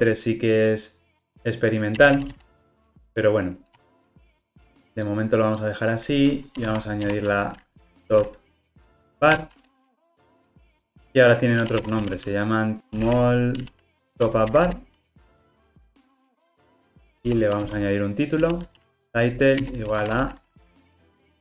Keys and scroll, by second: 9.4 Return, 15.6 Return.